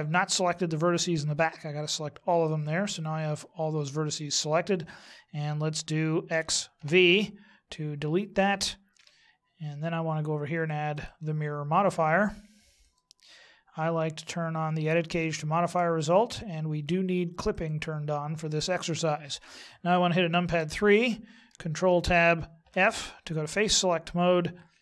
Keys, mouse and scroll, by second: 2.9 middle click, 6.3 x, 8.9 KP_1, 10.9 click, 15.1 click, 17.5 click, 20.5 KP_3, 21.9 ctrl+Tab.